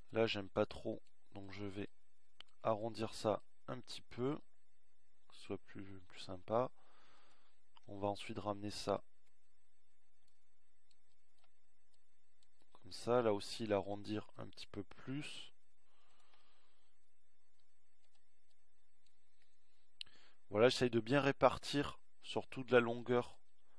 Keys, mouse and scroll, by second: 5.5 middle click, 20.7-22.7 middle drag.